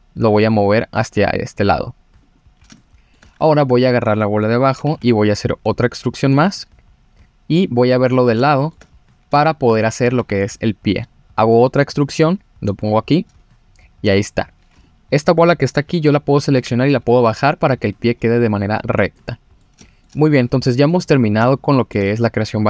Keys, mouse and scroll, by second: 2.8 shift+middle click, 3.5 click, 4.8 e, 4.8 z, 6.3 click, 7.6 click, 8.4 shift+middle click, 8.9-9.3 scroll up 3, 9.4 shift+middle click, 9.6 click, 10.2 e, 12.7 click, 14.7 click, 16.5 g, 18.2 scroll down 2, 19.1 middle click, 19.1-19.5 scroll down 3, 19.8 shift+middle click, 20.8 click, 21.4 shift+middle click, 22.2 scroll down 2.